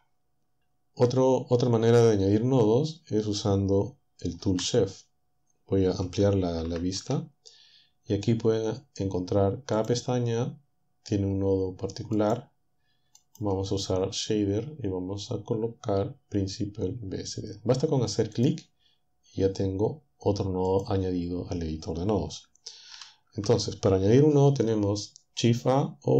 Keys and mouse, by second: 4.4 t, 6.6 ctrl+Up, 9.8 click, 12.2-13.5 drag, 18.4 click, 20.7 click, 22.9 ctrl+Down.